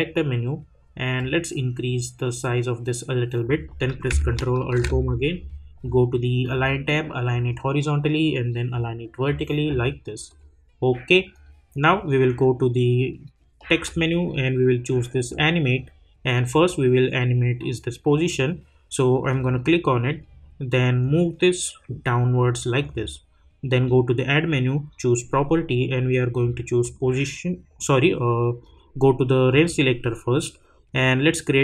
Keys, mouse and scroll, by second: 4.6 ctrl+alt+Home, 10.3 click, 13.7 click, 19.3-23.7 drag, 26.8 click.